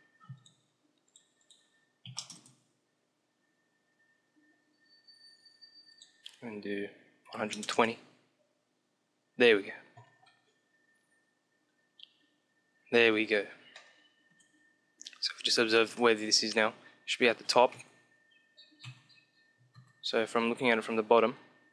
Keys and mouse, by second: 0.0-3.0 drag, 5.4-7.5 drag, 12.9-17.6 middle drag, 17.6 KP_1, 18.7 KP_7, 19.4 ctrl+KP_7.